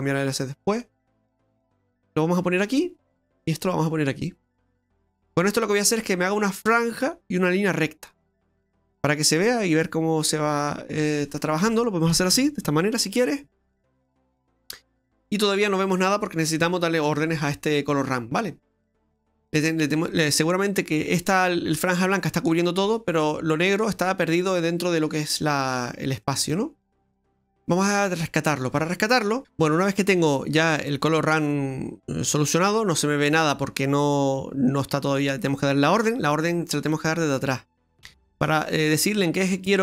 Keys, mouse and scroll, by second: 0.8 click, 3.6 click, 7.8-8.3 scroll down 2, 8.3 middle click, 8.3-9.4 scroll down 2, 9.4 click, 12.9-13.3 scroll down 2, 13.3 middle click, 17.1 middle click, 18.0-19.1 scroll down 5, 19.1 middle click, 25.1 middle click, 26.2 middle click, 27.0 scroll down 2, 27.3 middle click, 28.2 middle click, 28.5 scroll up 1, 29.4 ctrl+z, 29.4-30.5 scroll up 12, 30.9 middle click, 33.3 middle click, 34.1 middle click, 34.1 scroll down 2, 34.4 middle click, 37.9 Delete.